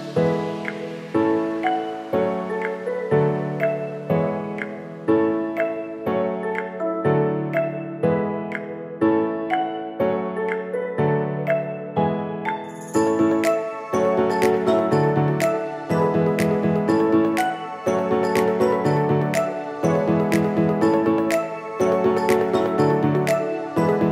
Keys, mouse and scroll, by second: 0.9-8.8 drag, 8.8 ctrl+z, 9.3-10.7 drag, 10.7 Return, 11.3 scroll up 1, 12.7-15.4 drag, 16.0 ctrl+shift+], 18.2-21.5 drag.